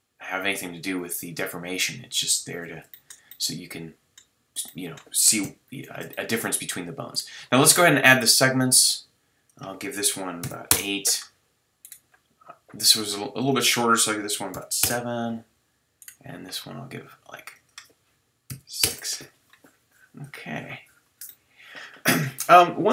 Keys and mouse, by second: 5.4 KP_3, 21.3-22.9 drag.